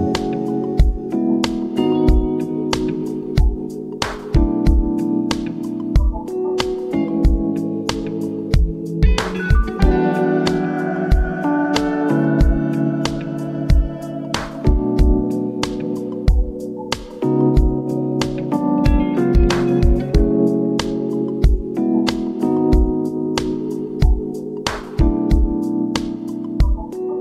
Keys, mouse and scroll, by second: 0.0-4.0 typing, 5.3 Escape, 5.7 v, 6.1 shift+Right, 10.5 Right, 12.0 click, 14.1-16.3 typing, 19.3 click, 24.0-27.0 drag.